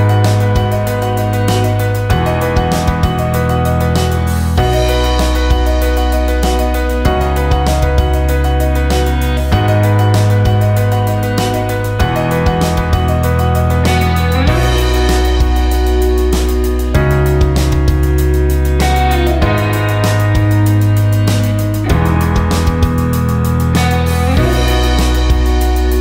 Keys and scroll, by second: 6.8-9.3 typing, 13.6 7, 24.3 ctrl+space.